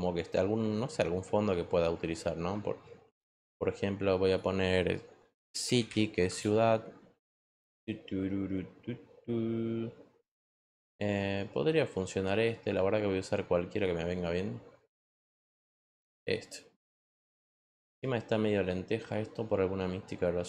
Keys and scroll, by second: 4.9-6.3 typing.